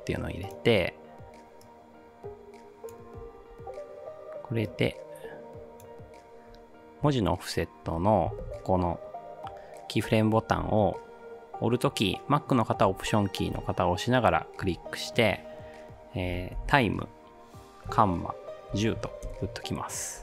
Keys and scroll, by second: 3.4 ctrl+z.